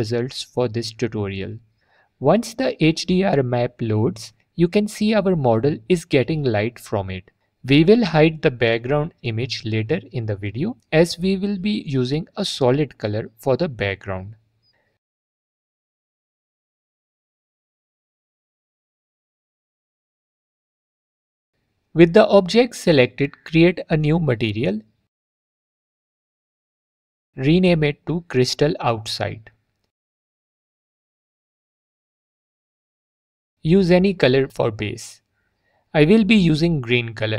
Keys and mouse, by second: 5.4 click, 5.7 alt+click, 7.7 alt+drag, 13.2 click, 22.4 click, 23.6 n, 25.8 click, 27.5 middle click, 28.2 middle click, 28.8 click, 29.4-32.9 middle drag, 34.5-36.3 middle drag.